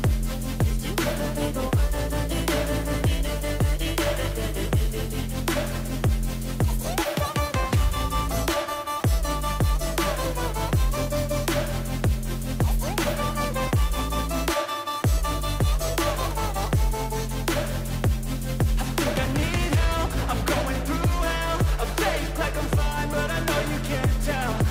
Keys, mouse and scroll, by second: 6.2-8.1 scroll down 21, 10.1 scroll down 1, 10.8 scroll down 3, 12.5 scroll down 3, 13.6 scroll down 2, 14.6-15.0 scroll down 2, 15.5 scroll down 3, 15.6 scroll up 2, 22.9 double click, 24.6 double click.